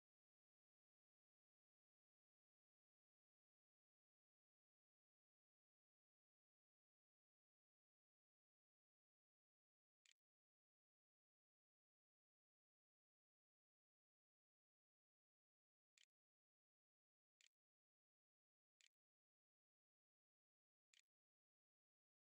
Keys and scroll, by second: 8.8-11.0 typing, 15.3 Up, 15.5 Return, 20.8-22.2 typing.